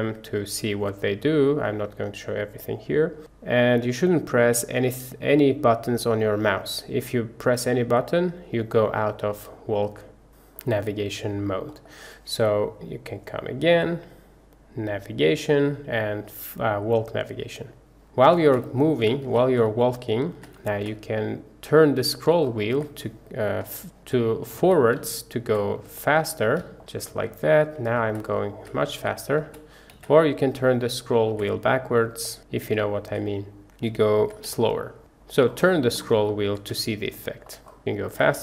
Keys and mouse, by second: 10.2 shift+`, 10.7-11.7 drag, 11.9 click, 13.3-17.5 drag, 17.5-26.0 middle drag, 26.0 click, 27.4-34.7 drag, 34.7-38.4 middle drag.